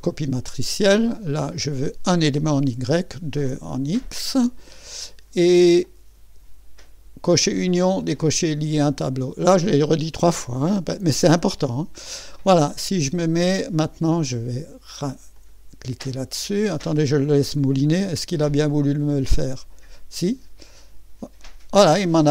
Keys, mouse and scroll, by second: 1.2 click, 5.8 click, 9.4-10.4 drag, 11.6 click, 15.3 click, 18.5 click, 19.3 click.